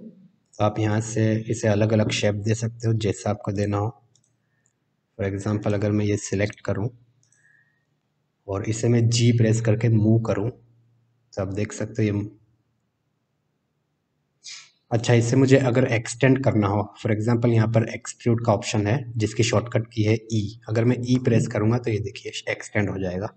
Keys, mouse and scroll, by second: 0.4 click, 3.5 shift+click, 4.1 shift+click, 5.6 shift+click, 6.4 shift+click, 7.2 shift+click, 8.0 middle click, 10.2 g, 21.1 e.